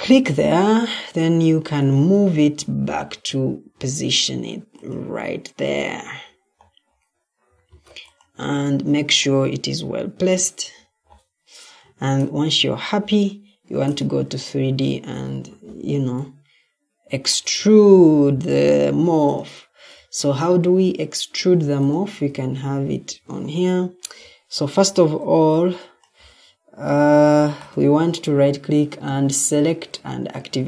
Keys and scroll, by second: 0.0 ctrl+d, 7.6 ctrl+d, 11.7 Escape, 15.3 Escape, 26.9 Escape.